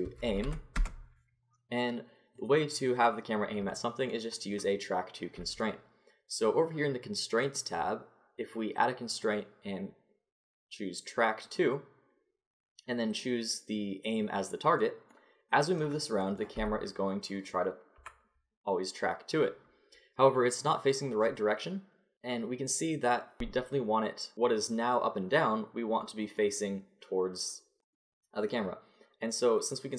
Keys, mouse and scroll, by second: 0.9-2.4 middle drag, 2.4-3.7 drag, 4.2-6.0 drag, 7.4-10.7 drag, 13.1-14.8 drag, 14.8 middle click, 15.5 click, 15.8 middle click, 16.6 g, 20.6-22.1 drag, 23.7-26.0 middle drag, 29.2-29.9 middle drag.